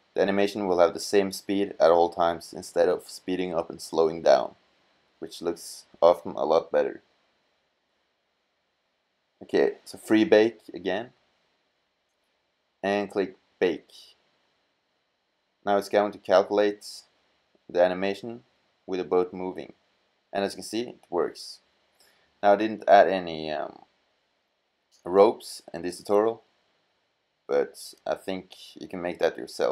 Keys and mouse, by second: 0.0 t, 0.9-2.0 drag, 2.8-3.8 drag, 7.3-8.4 drag, 11.6-15.6 drag, 26.8-27.4 middle drag.